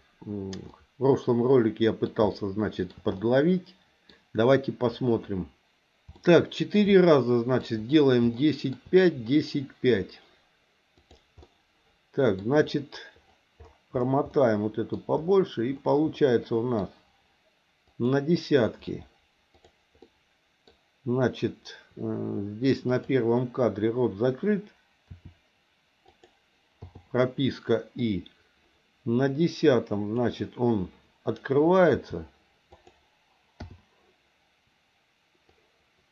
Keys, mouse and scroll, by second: 0.7-2.0 middle drag, 2.3 shift+middle click, 3.2 middle click, 6.1 shift+middle click, 6.9 middle click, 8.4 shift+middle click, 11.0 click, 11.4 middle click, 14.3 middle click, 16.1 middle click, 17.9 click, 20.0 middle click, 22.9 click, 25.0 r, 26.8 i, 28.0-30.3 drag, 31.9 r, 33.6 i, 35.5-36.1 drag.